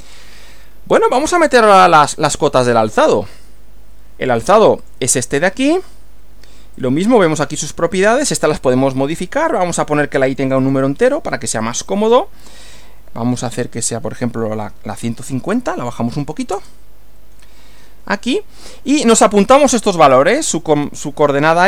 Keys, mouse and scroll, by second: 4.8 click, 6.8-7.6 drag, 10.3 click, 11.6 click, 14.7 1, 15.2 5, 15.5 0, 16.5 Return.